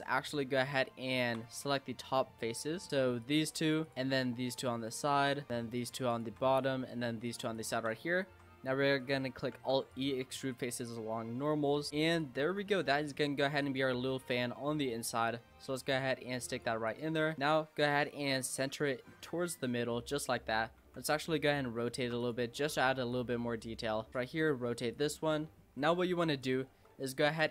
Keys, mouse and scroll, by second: 0.2 click, 0.6-2.5 shift+middle drag, 2.5-2.9 scroll up 6, 2.9 shift+middle click, 3.2 click, 3.8 shift+click, 3.9 middle click, 4.5 shift+click, 5.0 shift+click, 5.4 middle click, 5.8 shift+click, 6.1 shift+click, 6.5 middle click, 7.3 shift+click, 7.6 shift+click, 8.0 middle click, 8.9-9.5 scroll down 3, 9.5 alt+e, 12.4 Tab, 12.7 scroll down 1, 12.8 middle click, 13.3 Tab, 13.6 click, 14.2 l, 14.4 middle click, 15.1 click, 16.9 click, 17.3 s, 18.7 g, 20.8 r, 22.0 shift+d, 23.1 click, 24.3 r, 25.6-26.4 middle drag, 26.4 click, 26.8 Tab, 27.2 shift+a.